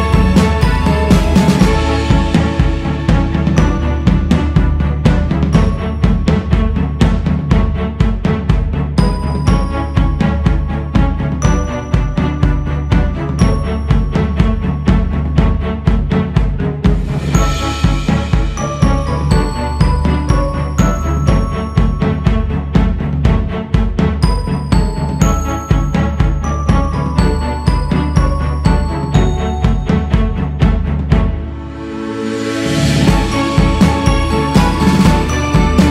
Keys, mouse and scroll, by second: 3.5-4.7 scroll up 2, 4.7-7.8 drag, 9.2-9.8 scroll up 2, 10.5-14.0 drag, 14.0-15.1 scroll down 4, 15.2 click, 15.7 scroll up 2, 16.5 scroll up 1, 16.5 shift+c, 16.9 f, 19.9-21.6 drag, 21.6-22.4 scroll down 2, 22.4 ctrl+z, 22.8-23.1 scroll up 2, 24.0-25.2 drag, 25.2-25.8 scroll up 1, 27.5-30.5 drag, 31.0-35.9 drag.